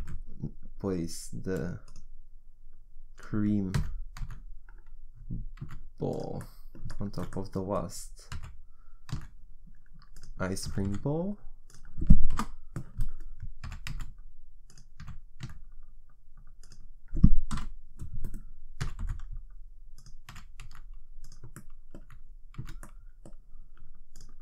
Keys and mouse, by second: 2.7-3.8 right drag, 3.8 g, 6.1 click, 6.4 middle click, 7.4 middle click, 7.7 middle click, 8.3 g, 10.7 g, 12.3 KP_1, 13.7 g, 15.0 g, 17.5 KP_3, 18.8 g, 20.3 g, 22.1 z, 22.6 z, 24.1 click.